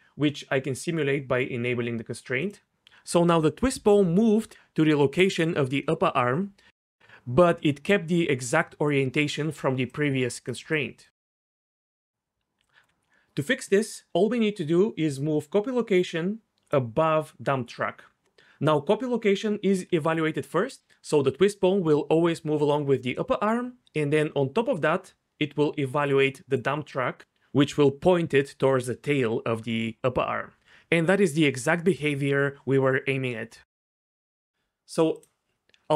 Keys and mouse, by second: 2.5 click, 7.8 click, 11.6 click, 12.6 d, 12.8 d, 15.1 d, 15.3-16.7 drag, 31.1 d, 31.7 d, 31.8 d, 34.5 click.